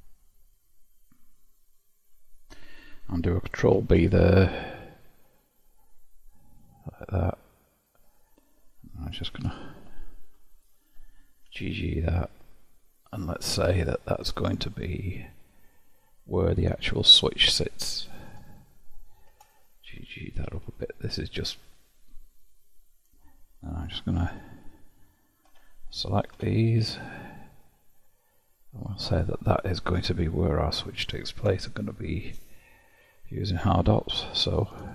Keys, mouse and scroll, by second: 0.0-3.8 drag, 3.8 ctrl+b, 9.5 alt+click, 10.5 alt+click, 11.5 g, 13.6-16.6 middle drag, 19.5 alt+click, 20.6 g, 30.0-33.0 middle drag.